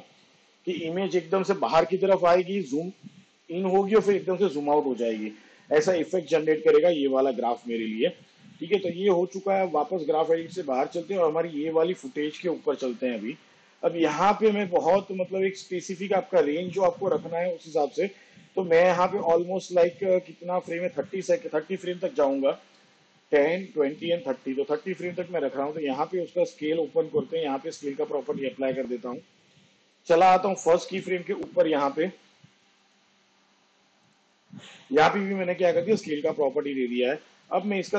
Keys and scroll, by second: 22.3 shift+Page_Down, 26.3 s.